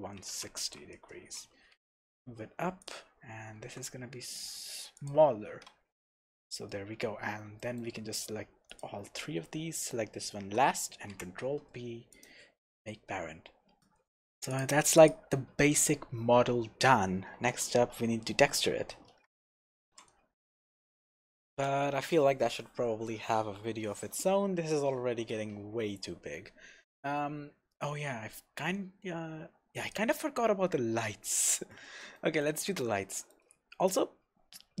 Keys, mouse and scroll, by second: 1.1 Return, 1.7 g, 2.9 click, 3.6 s, 5.1 click, 5.2 scroll down 1, 5.5 Tab, 5.8-6.1 scroll down 1, 6.1 Tab, 6.5-8.1 middle drag, 6.9 scroll up 1, 8.1 shift+click, 8.7 shift+click, 11.1 ctrl+p, 12.8 scroll down 1, 13.2-13.8 scroll up 1, 13.8 click, 14.5 click, 15.0 click, 19.8 ctrl+alt+r, 29.8 click, 30.4 scroll up 1, 31.6 shift+z, 32.0-34.8 middle drag, 33.8-34.8 scroll down 2.